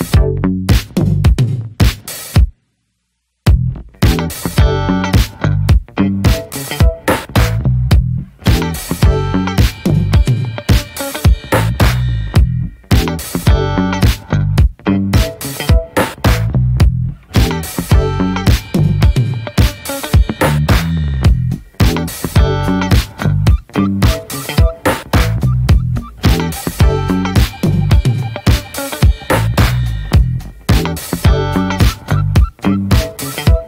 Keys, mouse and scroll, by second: 0.0 alt+middle click, 0.3 alt+middle click, 1.6 g, 2.8 r, 3.7 g, 4.9 click, 6.7 scroll down 2, 6.8 shift+middle click, 6.9 shift+d, 9.8 r, 10.6 middle click, 10.7-12.4 scroll up 2, 11.0 ctrl+s, 11.1 middle click, 12.4-12.9 scroll up 1, 12.9-14.0 drag, 14.9-16.5 drag, 16.5 middle click, 16.6 ctrl+s, 17.1-18.1 drag, 18.1-18.4 scroll down 2, 18.4 n, 19.4 click, 19.7 scroll down 2, 19.9 middle click, 20.6 click, 22.4 click, 24.1-25.3 drag, 27.1-28.1 middle drag, 28.1 click, 29.1 click, 29.6 scroll up 8, 30.4-30.8 drag.